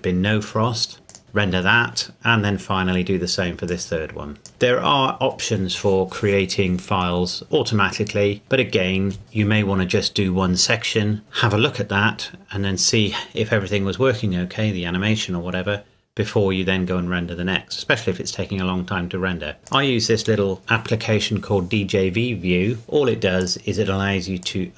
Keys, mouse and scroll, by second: 2.7-3.7 scroll down 1, 3.7 click, 19.6 click, 23.4 click.